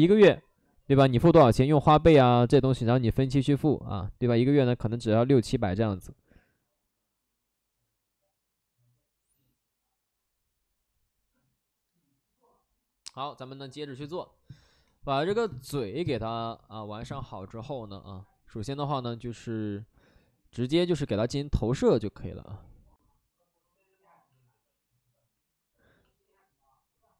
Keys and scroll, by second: 19.9 alt+s, 24.3 alt+s, 25.3 alt+s.